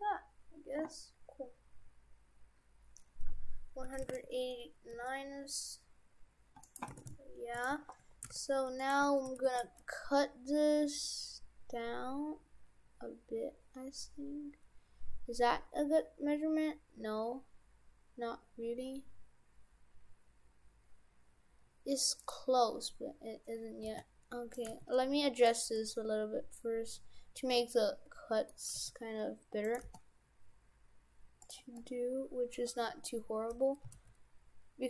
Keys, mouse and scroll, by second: 6.9 shift+f, 7.7 Tab, 8.0 Tab, 8.3 shift+f, 9.0 Tab, 9.5 ctrl+r, 22.7-23.9 scroll up 4, 23.9 scroll up 1, 23.9 g, 24.7 g, 25.8 middle click, 28.7 g, 29.8 g, 31.8 middle click, 33.9 s.